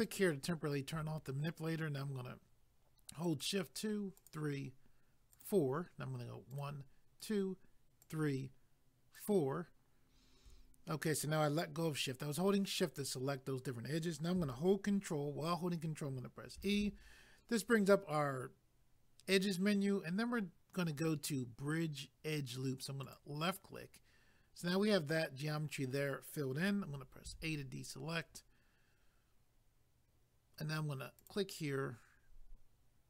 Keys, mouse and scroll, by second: 3.2 shift+click, 4.2 shift+click, 8.0 shift+click, 9.1 shift+click, 16.6 ctrl+e, 23.0 click, 27.3 a, 31.2 click.